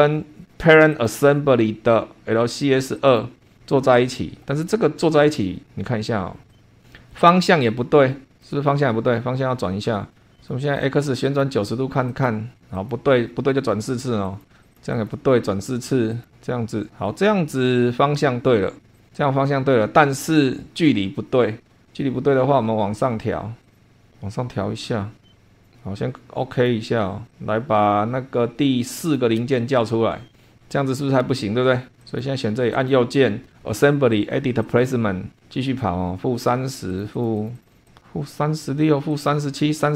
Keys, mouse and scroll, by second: 0.9 click, 2.9 click, 3.6-3.9 scroll down 2, 4.1 shift+click, 6.5 click, 6.7 scroll up 1, 7.1-8.6 drag, 8.9-10.2 drag, 10.3 click, 11.2 click, 12.1 click, 12.5 click, 12.8 click, 14.2 click, 14.7 click, 16.1 click, 17.1-18.8 drag, 18.9 click, 20.0-20.5 scroll down 1, 23.7-25.7 drag, 26.5 click, 27.3 click, 29.0 click, 29.4 space, 30.3-32.0 scroll up 1, 32.0 click, 32.7 right click, 34.6 click, 36.9-38.1 drag, 39.1 click.